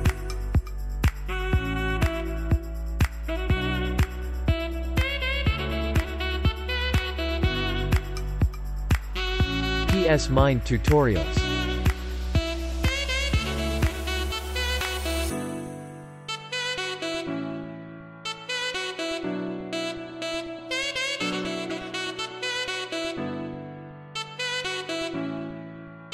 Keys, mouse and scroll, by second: 1.0 ctrl+j, 2.0-4.1 drag, 4.1 scroll up 1, 4.4 space, 4.6 click, 4.9 space, 5.6 scroll up 1, 6.0-8.0 typing, 7.7-9.6 drag, 9.6 scroll down 1, 10.9-12.2 drag, 12.2-13.5 scroll down 1, 13.9 space, 14.1 click, 14.7-15.0 scroll up 1, 15.2-17.2 typing, 15.7 click, 16.1 scroll down 1, 17.0 click, 17.6 click, 19.0 scroll down 1, 19.2-19.8 scroll up 1, 19.8 ], 20.1 click, 21.5 space, 21.7 click, 22.0 space, 22.8-25.4 drag, 25.8-26.1 scroll down 1.